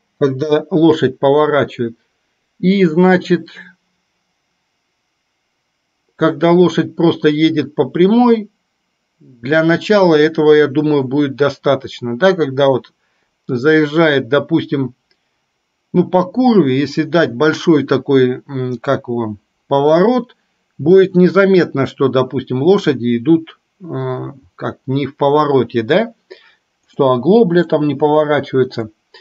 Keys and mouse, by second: 0.3 Delete, 27.1-27.8 middle drag, 28.9-29.2 middle drag.